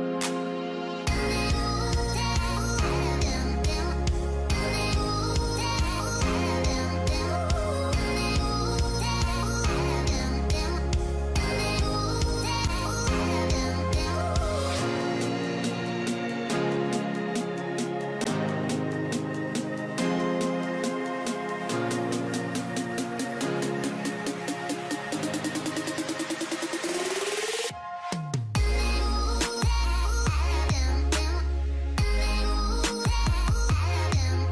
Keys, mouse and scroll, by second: 0.4 double click, 3.4 click, 9.4 alt+scroll down 1, 11.9-12.3 alt+scroll up 1, 13.6-14.0 typing, 15.6-16.7 typing, 29.1 typing.